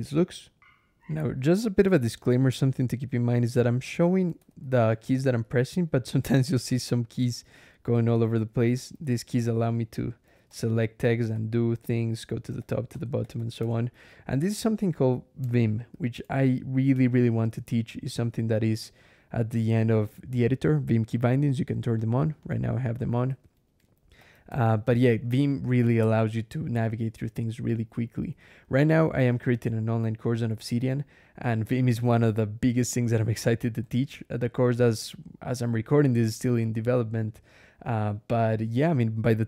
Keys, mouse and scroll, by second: 0.5 ctrl+alt+\, 1.4 click, 1.6 Escape, 3.7 ctrl+click, 4.0 ctrl+e, 4.2 ctrl+Escape, 4.4 ctrl+k, 5.4 ctrl+j, 7.7 ctrl+l, 8.1 ctrl+k, 8.4 ctrl+j, 8.7 ctrl+shift+v, 8.9 ctrl+shift+j, 9.2 ctrl+shift+d, 9.4 ctrl+shift+Escape, 9.8 ctrl+shift+k, 10.1 ctrl+shift+v, 10.3 ctrl+shift+Escape, 10.9 ctrl+shift+u, 11.6 ctrl+shift+k, 11.9 ctrl+shift+g, 12.7 ctrl+shift+Escape, 13.0 ctrl+shift+g, 13.4 ctrl+shift+Escape, 13.7 ctrl+shift+k, 13.9 ctrl+shift+j, 15.7 ctrl+,, 17.1-18.0 scroll down 4, 18.4 scroll down 2, 22.2 click, 22.8 click, 23.1 Escape, 23.7 ctrl+e, 24.3 ctrl+Escape, 24.6 ctrl+k, 25.5 ctrl+j, 26.5 ctrl+k, 27.2 ctrl+j, 27.6 ctrl+k, 29.7-31.2 typing, 32.7 j, 33.7 Escape, 33.8 j, 34.3 k, 35.9 Escape, 36.1 j, 36.4 k.